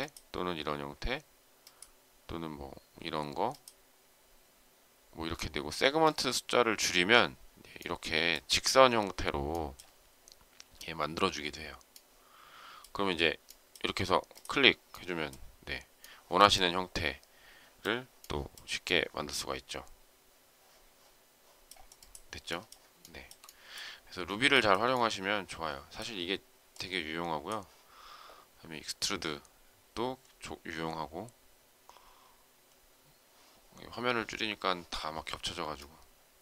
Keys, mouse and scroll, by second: 23.0 shift+middle click, 24.4 shift+middle click.